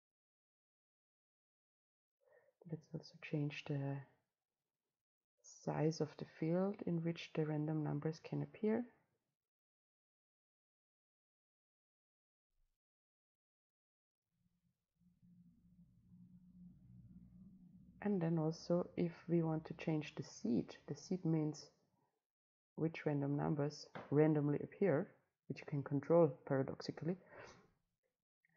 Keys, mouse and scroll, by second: 1.8-2.2 scroll down 2, 2.2-6.1 right drag, 6.1 click, 6.4-8.2 middle drag, 8.2-12.4 right drag.